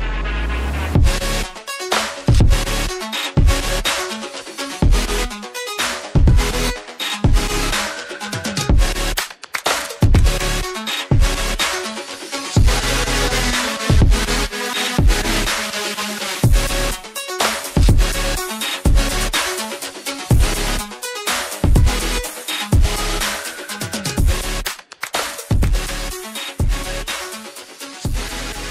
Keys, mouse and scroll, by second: 4.2 ctrl+c, 5.1 click, 6.5 ctrl+v, 7.0 click, 9.1 double click, 9.9 click, 27.7 Delete.